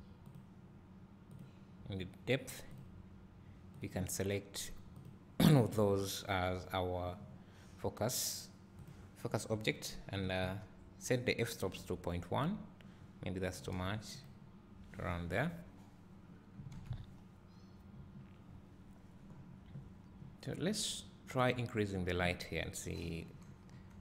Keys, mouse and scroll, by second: 11.8 click, 14.2 click, 17.1 s, 18.6-19.0 scroll down 1, 21.8 click.